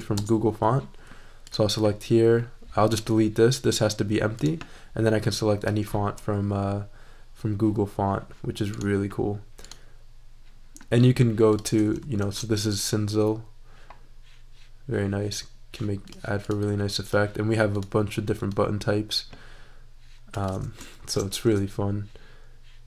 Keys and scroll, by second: 0.0 BackSpace, 0.1 Return, 12.2 shift+super+e, 20.9 shift+super+e.